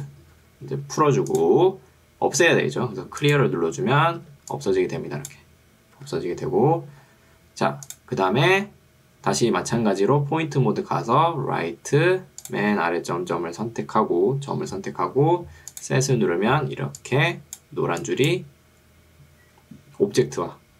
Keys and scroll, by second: 0.4 Escape, 4.2 ctrl+2, 6.0 Escape, 16.8 ctrl+2, 19.6 Escape.